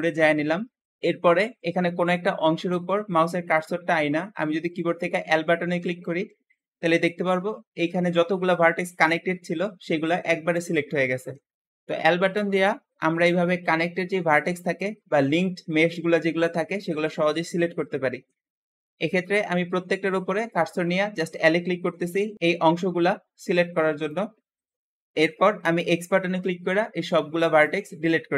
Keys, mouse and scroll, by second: 5.1 l, 19.2-21.8 typing, 22.8 l, 23.1 l, 23.9-25.5 middle drag, 25.7 x.